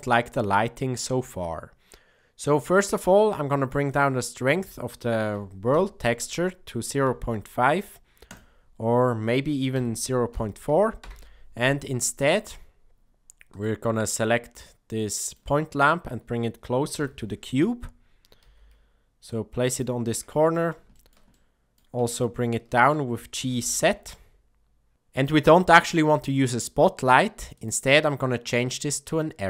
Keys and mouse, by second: 4.0-11.6 drag, 12.2 middle click, 13.5 click, 14.1-15.3 middle drag, 16.9 KP_7, 18.4 g, 20.0-20.5 middle drag, 20.9 shift+middle drag, 21.3-21.7 middle drag, 22.2-22.9 shift+middle drag, 23.3 g, 29.3 click.